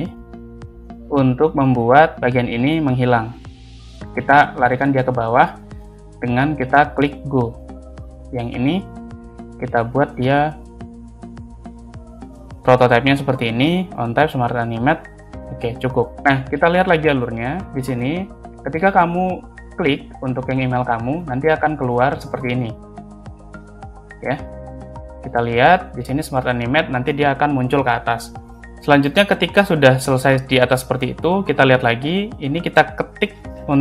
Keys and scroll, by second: 1.2 space, 5.4 shift+Down, 5.5 shift+Up, 16.1 space, 21.3 space.